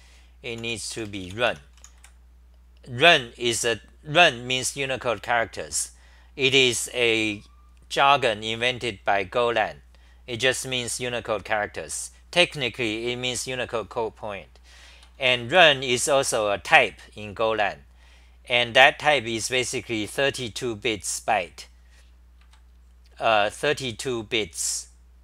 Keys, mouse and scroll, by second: 1.3-2.5 typing, 14.9 ctrl+g, 15.3-16.0 typing, 22.4 ctrl+g.